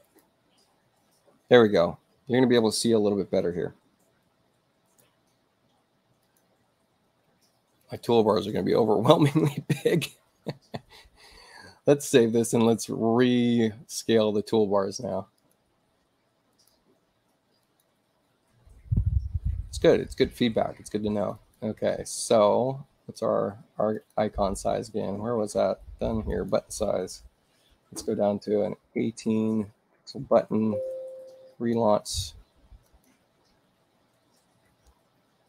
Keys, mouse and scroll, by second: 0.0 click, 2.5 click, 4.8 click, 6.2 click, 7.8 click, 12.5 click, 15.3 click, 16.5 click, 17.6 click, 21.3 click, 23.9 click, 26.3 click, 29.9 click, 31.9 click, 32.9 click.